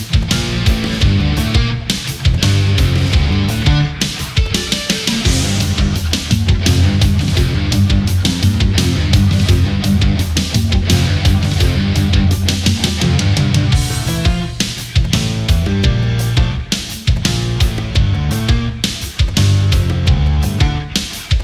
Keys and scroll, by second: 6.5 space, 7.8 ctrl+0.